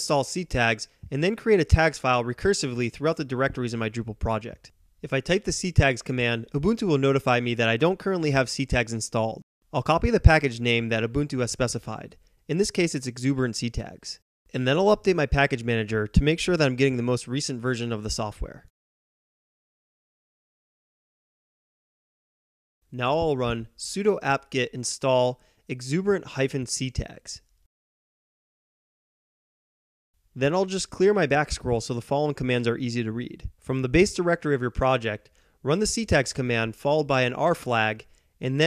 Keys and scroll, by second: 0.0-2.4 typing, 5.4-7.2 typing, 14.2 ctrl+c, 15.8-28.4 typing, 31.0-32.1 typing, 34.7-37.8 typing.